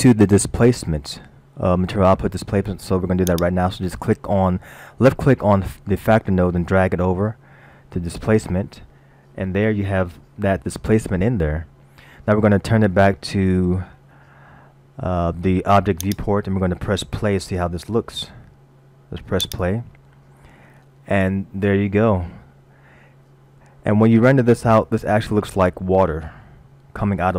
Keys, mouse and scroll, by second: 3.3 click, 9.8 middle click, 10.5-11.2 scroll up 1, 16.0 click, 17.7 middle click, 19.5 click.